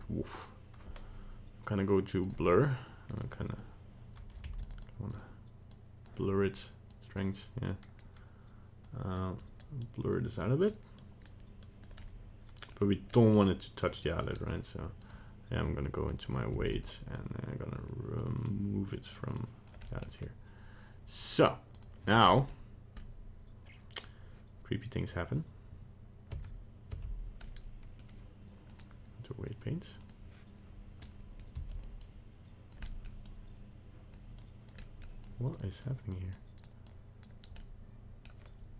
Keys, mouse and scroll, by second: 2.2 click, 2.7 click, 3.4 click, 4.5 f, 4.8 click, 5.8 click, 6.9 click, 7.8 click, 9.2 click, 9.9 click, 10.4 click, 11.1 click, 11.7 click, 12.0 middle click, 13.2 middle click, 13.6 click, 15.0 click, 16.1 click, 16.5 f, 17.2 click, 18.6 click, 19.4 click, 19.8 middle click, 21.2 click, 22.3 middle click, 23.0 middle click, 26.4 Tab, 27.0 Tab, 27.4 middle click, 28.7 click, 31.0 middle click, 31.5 f, 32.1 click, 32.8 middle click, 33.3 click, 34.4 click, 34.8 middle click, 35.3 click, 35.8 click, 36.4 click, 36.9 click, 37.5 middle click, 38.2 middle click.